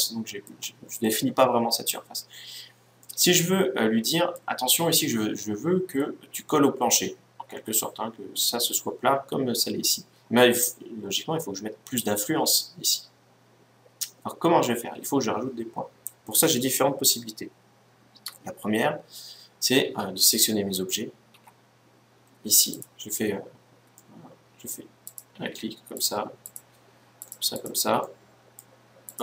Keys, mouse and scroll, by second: 2.8-4.5 middle drag, 9.6 scroll up 1, 9.7 middle click, 20.0-21.8 right drag, 21.0 a, 22.4-24.1 right drag, 23.7-25.5 middle drag, 24.8-29.2 right drag, 27.7-29.2 middle drag.